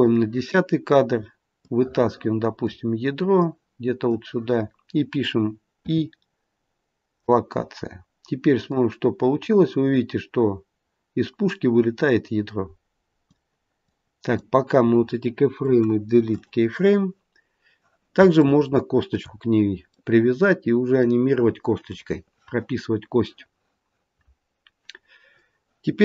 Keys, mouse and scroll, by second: 1.5 click, 3.3 click, 5.7 i, 8.6 click, 13.8 click, 15.5 Delete, 18.4 shift+middle click, 19.9 middle click.